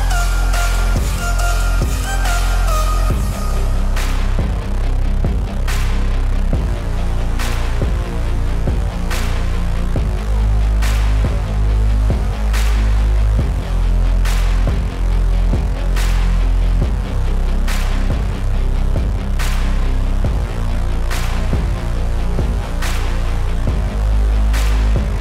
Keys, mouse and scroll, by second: 0.9 click, 4.5 click, 7.0 click, 10.0 click, 12.9 click, 14.3 click, 18.5 Up, 18.8 click, 20.0 Up, 20.8 click, 21.7 ctrl+i, 22.4 click, 22.9 b.